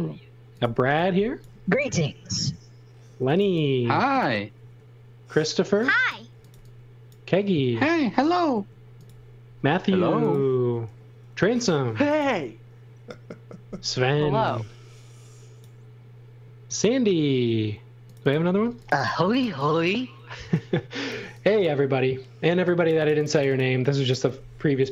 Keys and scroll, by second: 0.8 e, 2.9-4.5 typing, 6.0-7.9 typing, 11.7-12.7 typing, 17.3 space, 18.9-21.1 typing.